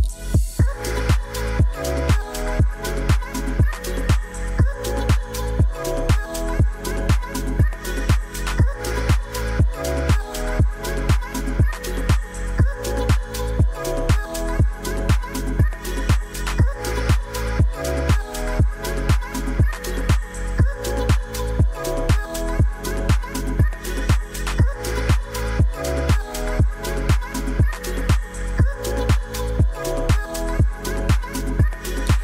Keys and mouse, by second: 1.2 ctrl+alt+KP_0, 3.2-5.1 drag, 5.8 f, 6.0 g, 7.6 middle drag, 7.8 click, 7.8 middle drag, 7.9 drag, 8.4 click, 8.5 middle click, 8.7 click, 9.3 middle drag, 10.1 g, 11.9 KP_5, 12.4 middle drag, 12.9 middle click, 13.6 r, 13.6 r, 14.7 middle drag, 16.0 middle click, 16.6 middle click, 17.0 KP_0, 18.2 drag, 19.4 g, 20.3 shift+z, 21.3 r, 21.4 r, 22.8 KP_0, 24.3 click, 25.5 shift+middle click, 27.0 ctrl+s, 31.0-32.2 drag.